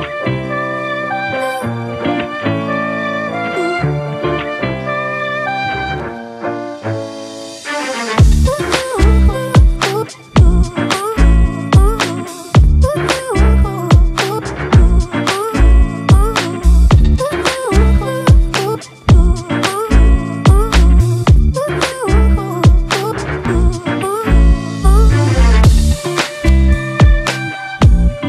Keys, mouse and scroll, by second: 0.6 Return, 3.1 ctrl+t, 4.1 alt+shift+click, 9.5 Return.